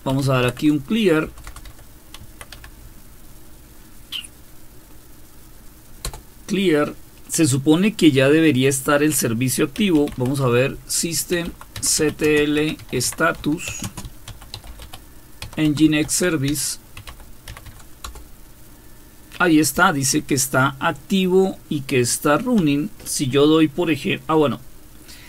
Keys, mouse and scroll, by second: 0.0-2.5 typing, 6.0 Return, 9.5-18.2 typing, 19.7 typing, 22.6 typing.